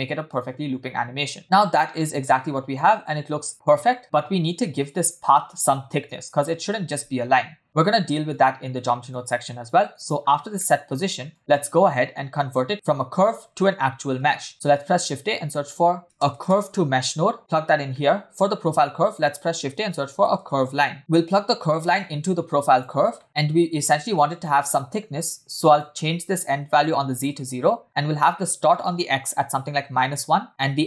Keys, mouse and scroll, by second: 1.0-1.3 scroll down 1, 1.4 shift+middle click, 1.4 space, 8.3 click, 9.5 middle click, 10.2-10.6 scroll up 1, 10.6 middle click, 10.9-11.4 scroll up 1, 11.4 click, 14.2 space, 14.5 shift+a, 18.0 middle click, 18.5 shift+a, 21.0 middle click, 21.0-21.8 scroll up 2, 21.8-22.8 drag, 23.2 shift+middle click, 23.3 scroll up 1, 25.7-27.1 drag, 28.7-30.0 drag.